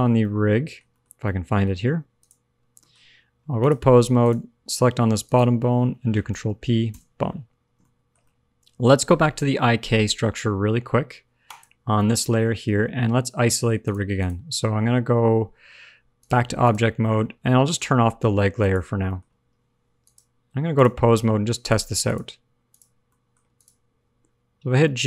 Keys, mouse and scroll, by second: 0.2 middle click, 0.8 shift+middle click, 1.0 scroll up 2, 1.2 middle click, 2.1 shift+click, 2.7 shift+middle click, 3.5 click, 5.2 click, 6.2 ctrl+p, 7.6-8.1 scroll down 4, 8.1 shift+middle click, 8.3 middle click, 11.4 click, 12.0 shift+middle click, 12.8 middle click, 12.8-13.8 scroll up 1, 13.8 click, 14.1 click, 16.1 click, 16.8 scroll down 1, 17.0 middle click, 18.5 click, 19.0 middle click, 21.5 click, 22.0 click, 22.6 click, 23.0 middle click, 23.5 click, 23.9 g.